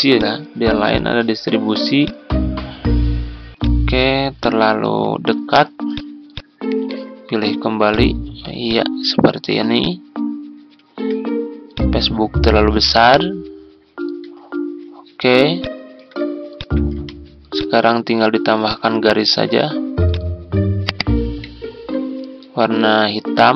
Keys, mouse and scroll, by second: 15.5 ctrl+click, 16.5 shift+click, 20.8 ctrl+click, 21.0 ctrl+click.